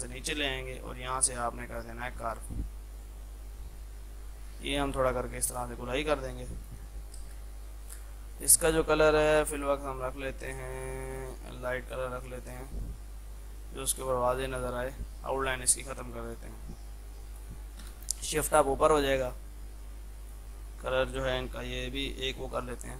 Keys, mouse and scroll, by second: 7.3 space, 10.8-15.2 drag, 15.2 right click, 16.3 click, 17.8 shift+Page_Up, 19.0 click.